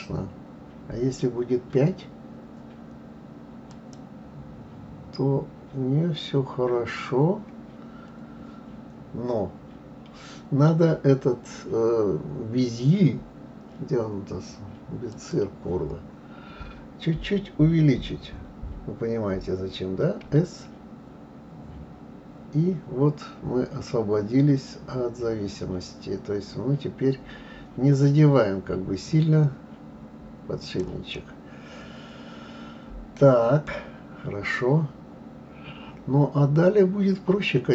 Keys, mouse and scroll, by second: 3.7-6.7 drag, 7.5-9.2 scroll down 2, 9.2-10.6 scroll down 1, 15.1 click, 31.1-34.1 middle drag, 34.1-37.2 scroll down 2.